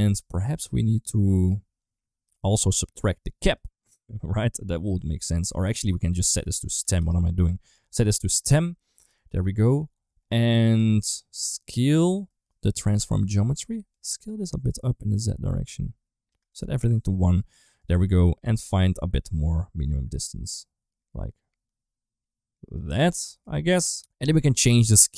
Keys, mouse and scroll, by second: 3.2 middle click, 3.7 click, 4.7 middle click, 5.8-6.8 drag, 7.9 middle click, 9.0 middle click, 10.8 middle click, 11.6 middle click, 12.1 middle click, 13.8-16.1 shift+drag, 16.3 click, 17.6 middle click, 18.5-22.5 shift+drag, 23.2 middle click, 23.8 ctrl+z.